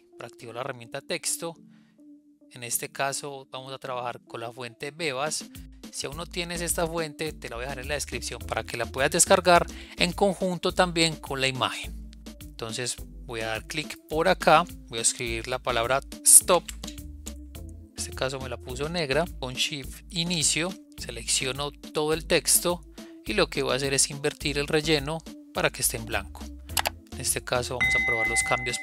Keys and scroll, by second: 19.4 shift+Home.